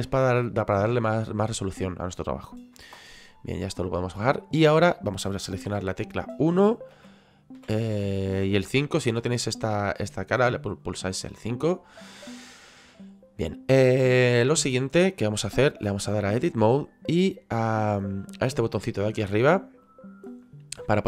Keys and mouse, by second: 3.8 click, 5.7 KP_1, 6.9 KP_5, 15.7 click, 19.8 click.